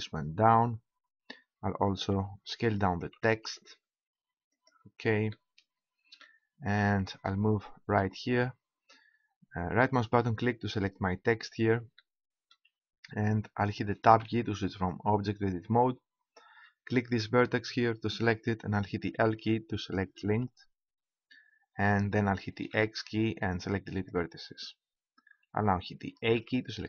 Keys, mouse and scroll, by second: 1.8-3.7 right drag, 3.0 s, 4.6-6.5 drag, 9.7-11.5 right drag, 11.5 middle click, 12.0 middle click, 14.2 Tab, 17.0-19.1 right drag, 19.1 l, 20.5 l, 22.7 x, 26.4 a.